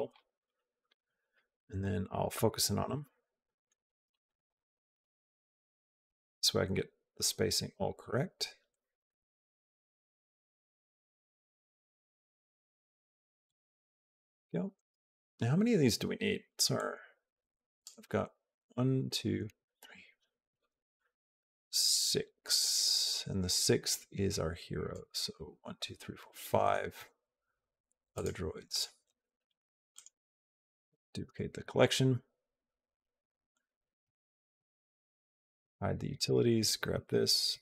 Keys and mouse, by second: 0.3 alt+middle click, 1.6 middle click, 2.6 KP_Decimal, 3.3 middle click, 4.0 shift+middle click, 4.3 click, 5.9 g, 9.0-10.0 middle drag, 10.6 g, 16.6-17.7 drag, 22.5-24.8 drag, 28.5 click, 29.8-30.8 right drag, 33.3 click, 35.4 click, 36.0 click, 37.5 g.